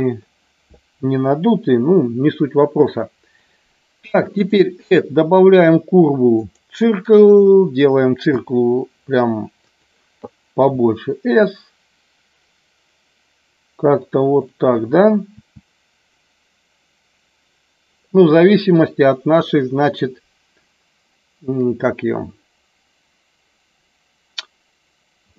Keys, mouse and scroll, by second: 1.2 KP_7, 4.3-6.6 drag, 8.3 s, 9.5 click, 10.5 s, 14.2 click, 15.3 s, 18.6 click.